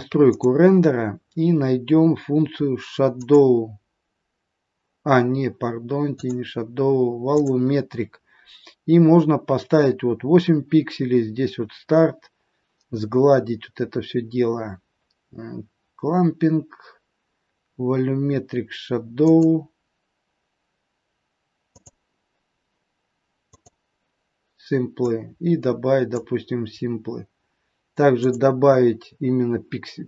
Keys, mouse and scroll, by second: 0.2 click, 0.9-2.4 scroll down 6, 2.4-3.1 scroll down 3, 3.1 click, 6.0 click, 7.3 click, 7.8 scroll down 5, 19.2 click, 21.7 click, 23.6 click, 25.0 click.